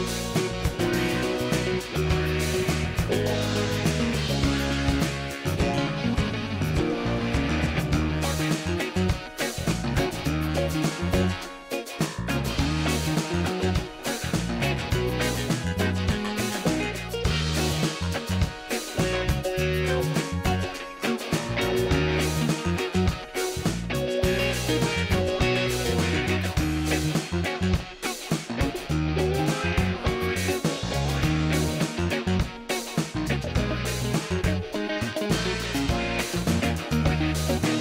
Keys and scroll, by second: 3.3 space, 4.6 ctrl+space, 4.9 ctrl+space, 11.6 space, 12.1 space, 13.0 ctrl+alt+d, 16.8 ctrl+b, 27.0 ctrl+d, 28.2 ctrl+alt+z, 29.4 ctrl+alt+z, 30.9 ctrl+d, 31.2 ctrl+space, 32.9 F9, 33.6 ctrl+space, 35.3 space.